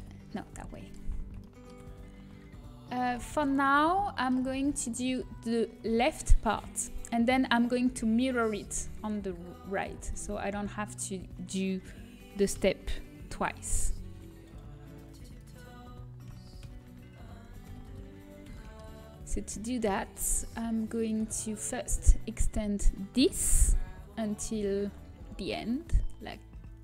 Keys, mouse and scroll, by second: 4.1 shift+c, 8.9-10.5 middle drag, 10.5-12.7 right drag, 12.7 g, 15.3-17.6 drag, 16.2 s, 18.5-20.7 middle drag, 20.7-24.2 right drag, 24.2 g.